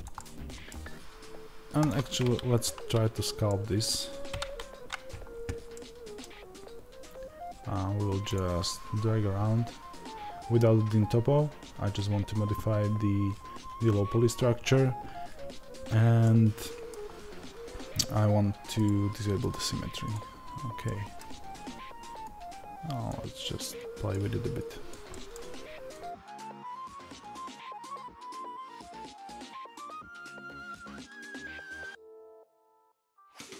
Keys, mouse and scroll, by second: 0.0-2.1 middle drag, 2.1-33.5 drag.